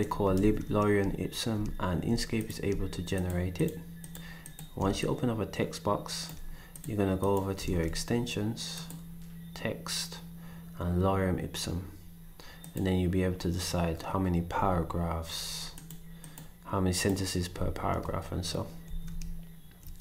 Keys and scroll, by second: 0.3 ctrl+s, 7.7 ctrl+s, 18.9 ctrl+s.